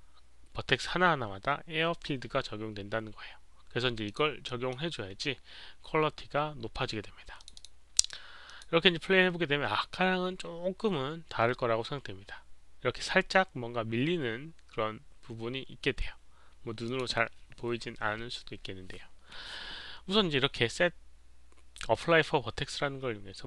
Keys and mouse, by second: 4.0 click, 4.4-7.3 middle drag, 7.3 click, 7.6 click, 8.4 click, 14.9 middle click, 14.9 click, 17.0 click.